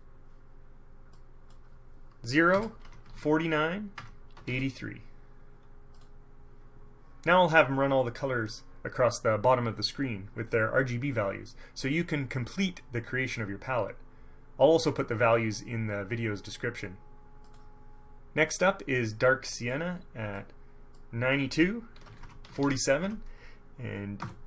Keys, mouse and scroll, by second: 0.0 click, 1.3 click, 2.7 KP_0, 3.0 Tab, 3.2 KP_4, 3.3 KP_9, 4.1 Tab, 4.5 KP_8, 4.6 KP_3, 6.1 click, 17.6 click, 19.9 click, 21.1 click, 22.1 KP_9, 22.3 Tab, 22.6 KP_4, 22.7 KP_7, 23.2 Tab, 24.3 KP_8.